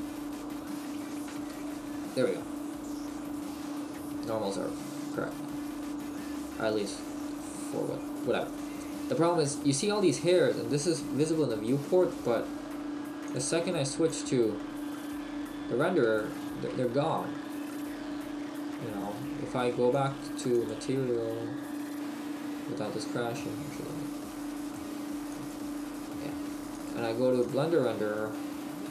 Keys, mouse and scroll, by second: 1.8 Tab, 2.2 middle click, 13.3 click, 16.2 shift+middle click, 17.6 middle click, 19.9 click, 24.6 click.